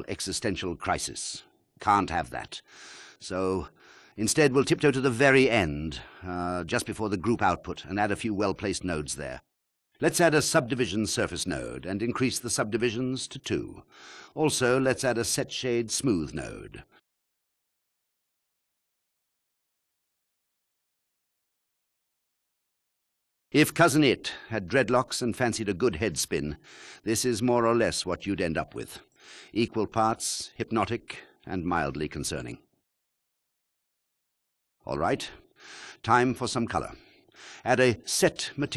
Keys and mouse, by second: 1.0-2.5 drag, 9.5 shift+a, 15.0-15.5 drag, 16.2 shift+a, 21.2 click, 22.0 click, 30.5 click, 33.0-34.4 drag, 34.4 g, 36.6 shift+a.